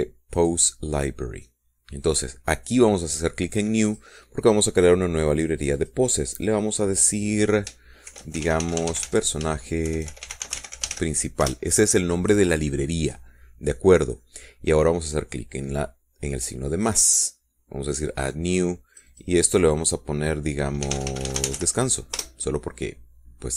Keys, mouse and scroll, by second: 1.6 click, 5.1 click, 6.8 click, 9.3-12.2 typing, 12.7 shift+Return, 18.0 click, 19.4 click, 20.1 click, 22.1-22.8 typing.